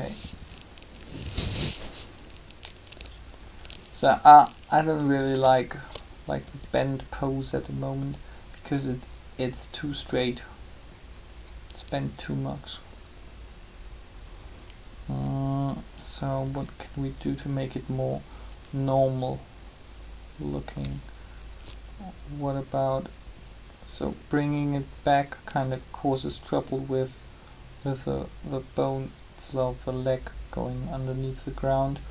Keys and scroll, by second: 6.4 r, 9.9 r, 16.4 r.